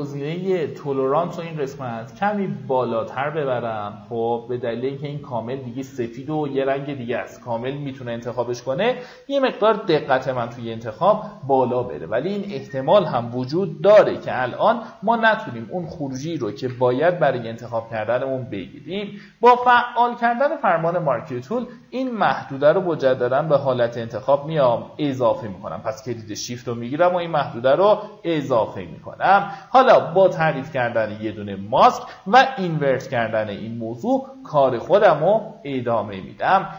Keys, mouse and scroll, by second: 0.2 click, 16.3 click, 20.1 alt+click, 21.7 ctrl+z, 22.5 shift+click, 28.0 click, 32.2 ctrl+i, 33.4 alt+scroll up 1, 34.0-35.1 alt+scroll up 1, 35.1-36.7 drag.